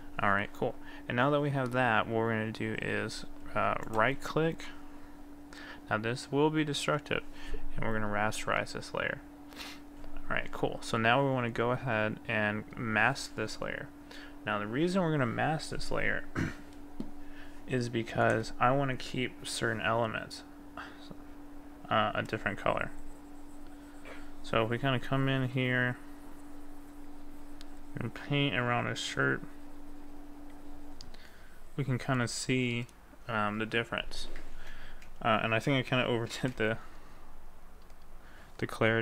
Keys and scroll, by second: 34.6 ctrl+z, 35.7 ctrl+z, 36.5 ctrl+z.